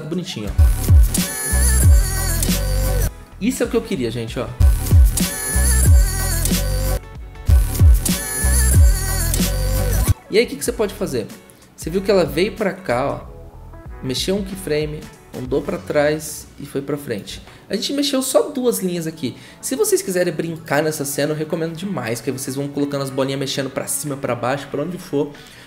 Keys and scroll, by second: 0.4 0, 4.4 0, 7.3 typing.